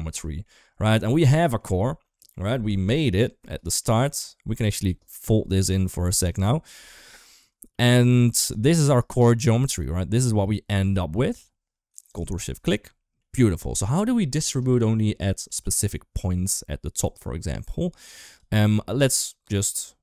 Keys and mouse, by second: 0.0 middle drag, 0.8 middle click, 1.9 middle click, 2.6 middle click, 3.5 middle click, 6.1 click, 6.9 middle click, 7.6 middle click, 8.1 ctrl+s, 9.4 middle click, 9.8 middle click, 10.7 middle drag, 12.6 middle drag, 13.7 shift+middle drag, 15.3-16.0 middle drag, 18.0 click, 19.0 ctrl+z.